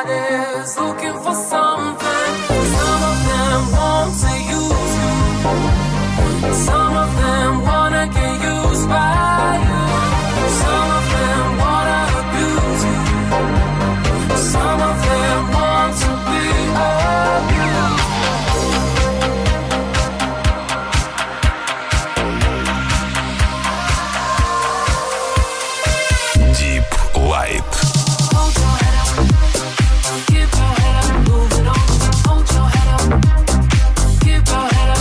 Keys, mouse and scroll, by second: 0.0-3.5 middle drag, 3.6-35.0 middle drag.